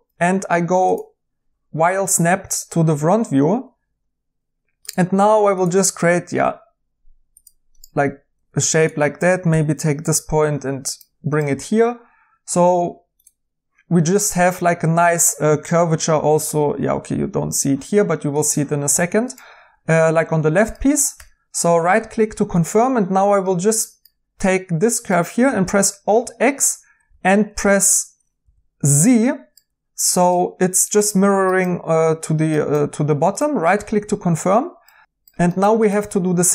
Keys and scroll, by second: 8.3 1, 9.4 g, 21.1 2, 27.0 alt+x, 27.3-28.1 typing, 30.9-32.5 typing, 34.0-34.4 typing.